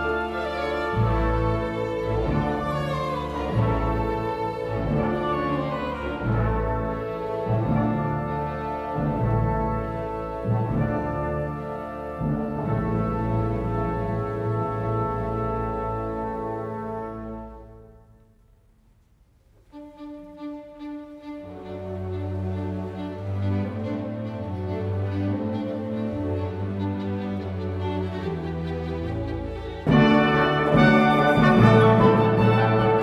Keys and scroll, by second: 13.0-14.1 typing, 18.0 0, 18.3 0, 30.8 2, 31.7 1, 32.4 0.